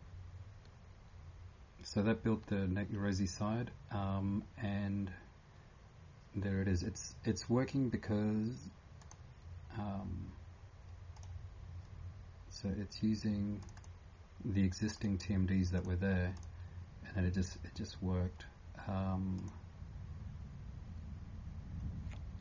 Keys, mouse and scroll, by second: 9.0 click, 11.1 click, 13.8 click.